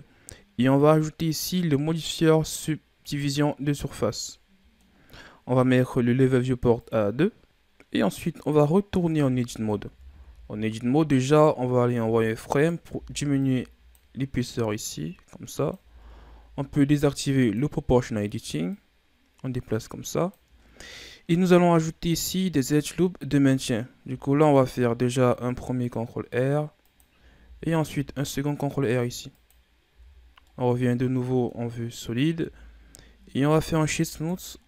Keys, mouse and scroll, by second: 0.7-3.7 drag, 4.2-6.6 middle drag, 6.6-9.0 drag, 9.0 Tab, 10.1 KP_3, 11.9 z, 12.4 right click, 12.8 b, 14.7-15.7 drag, 15.7 ctrl+z, 17.3 click, 18.6-20.5 drag, 20.5-21.1 scroll down 2, 21.1-23.3 scroll up 2, 23.9 ctrl+r, 27.3 ctrl+r, 29.8 z, 30.1 scroll down 1, 30.3-31.6 middle drag, 31.6-32.3 scroll up 2, 32.3 Tab, 33.3 w, 34.6 scroll down 1.